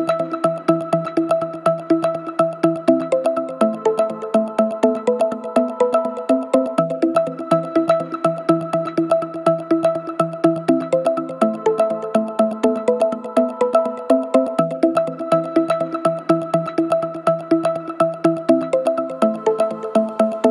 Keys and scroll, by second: 3.4 2, 6.6 4, 11.2 3, 17.7 4, 20.3 2.